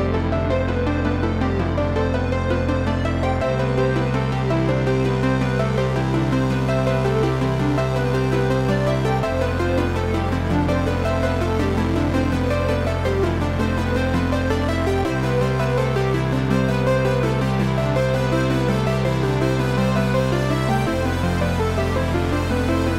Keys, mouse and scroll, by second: 0.3 s, 1.9 click, 2.6 g, 3.9 click, 4.1-7.8 middle drag, 4.9 scroll up 1, 5.5 g, 7.8 click, 8.2 s, 11.0 click, 11.4 g, 12.6 click, 13.1-15.7 middle drag, 13.6-14.8 scroll up 4, 14.8 Tab, 15.7 click, 16.5 e, 20.1 click, 20.3-22.0 middle drag, 20.6-20.9 scroll down 2, 21.3 scroll up 2, 22.0 click, 22.6 e.